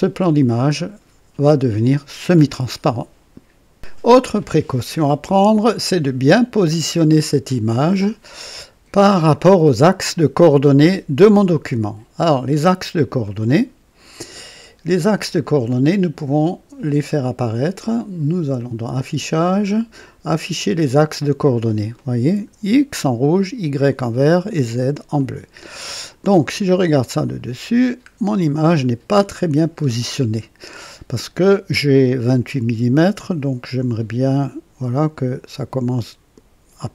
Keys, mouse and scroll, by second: 5.4-8.1 scroll down 2, 13.2-15.4 drag, 18.2 click, 20.6 click, 22.0 click, 25.2 click, 27.2 click, 28.0-28.5 scroll up 2, 28.8 right click, 29.8-34.7 scroll down 2.